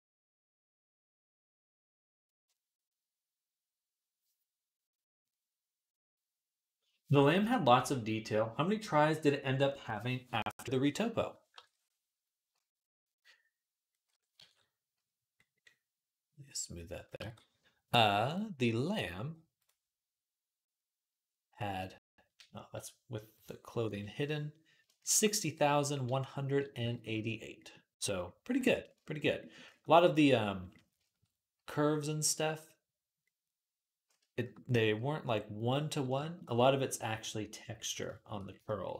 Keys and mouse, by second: 11.4 ctrl+Tab, 14.8 ctrl+s, 17.5 ctrl+s, 18.1-23.2 drag, 23.2-38.9 middle drag, 24.0 /.